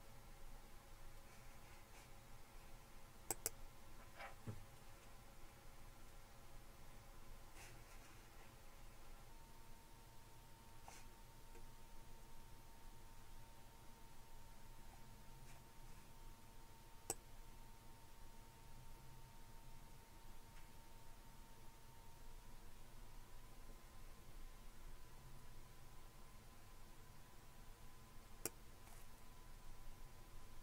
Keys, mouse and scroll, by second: 3.3 click, 11.5-15.1 scroll up 2, 17.1-30.2 drag.